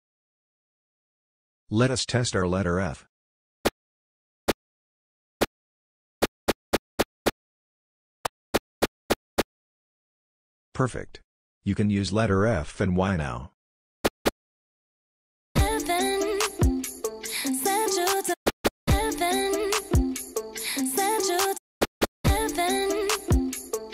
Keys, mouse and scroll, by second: 0.4 click, 3.7-7.0 typing, 8.2-9.4 typing, 14.0 y, 15.5 c, 18.4 y, 18.9 c, 21.8 y, 22.2 c.